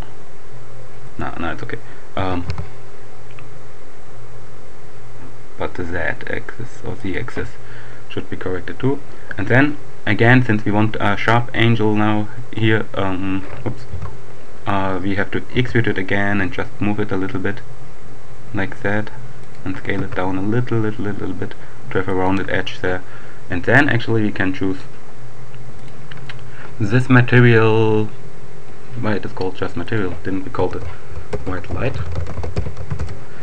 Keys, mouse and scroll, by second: 1.1 right click, 2.2 s, 2.5 z, 6.7 click, 11.7-12.9 right drag, 13.8 ctrl+z, 15.4 e, 19.2 shift+click, 20.0 shift+s, 22.0 click, 24.8-26.4 drag, 29.7 click, 30.7-32.9 typing, 33.0 shift+Return.